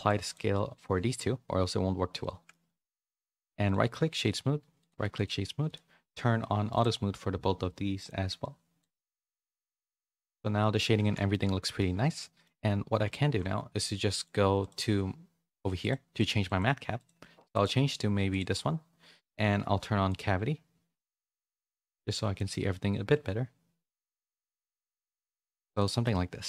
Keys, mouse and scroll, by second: 0.8 middle click, 2.2 middle click, 3.0 middle click, 3.6 click, 4.0 right click, 4.7 click, 6.7 click, 7.9-10.3 drag, 11.0 a, 11.3 shift+middle click, 11.6 middle click, 12.1 middle click, 14.1-15.5 drag, 15.8 click, 16.1 click, 16.6-25.3 drag, 25.7 click, 26.0 middle click.